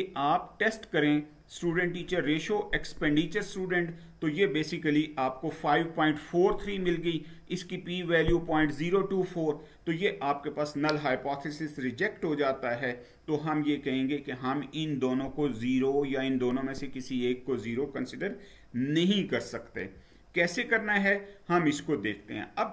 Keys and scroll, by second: 19.8 Down.